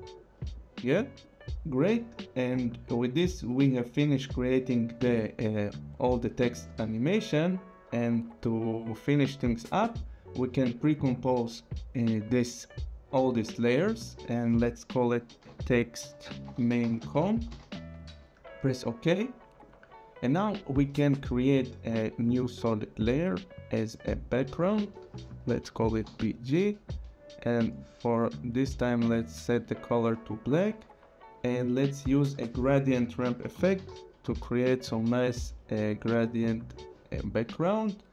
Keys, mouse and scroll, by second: 5.6 scroll, 9.4 click, 10.6 right click, 13.4 click, 15.4-18.4 typing, 19.6 click, 21.4 right click, 24.1 click, 25.6-26.5 typing, 27.6 click, 29.8 click, 32.1 click, 33.0-35.3 typing, 36.7 click.